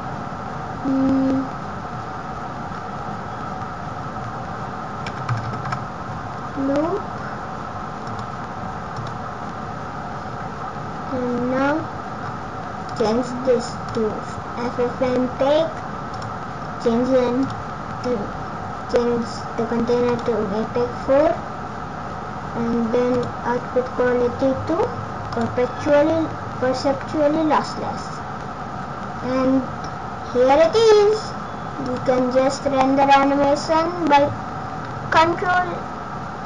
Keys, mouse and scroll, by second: 11.0-11.7 scroll down 3, 11.7 scroll down 1, 12.1 scroll down 1, 12.7 scroll down 4, 12.8 click, 14.9 scroll down 1, 16.5 click, 16.5-17.3 scroll down 4, 17.3 click, 23.0 click, 29.0 scroll down 1, 31.8 click.